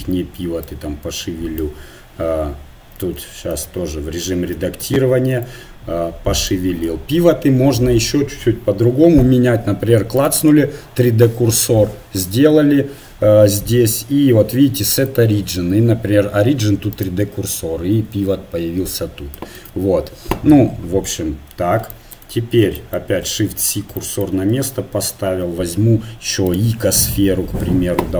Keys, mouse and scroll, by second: 0.8-2.4 drag, 3.2 ctrl+z, 3.6 Tab, 4.6 a, 4.8 a, 5.4 click, 6.5 click, 6.6 Tab, 10.4-11.9 drag, 15.0-17.0 drag, 19.6 ctrl+z, 23.2 shift+c, 24.5 shift+a.